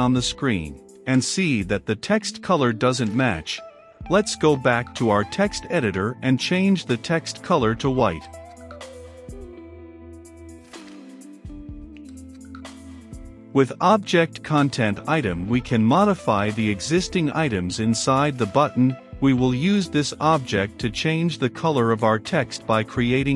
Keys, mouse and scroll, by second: 12.8 Return, 15.2 c, 15.3 o, 15.5 n, 16.5 Down, 17.0 Return, 18.3-19.4 typing, 19.8 Return, 20.5 shift+t, 20.7 e, 20.9 x, 21.7 Return.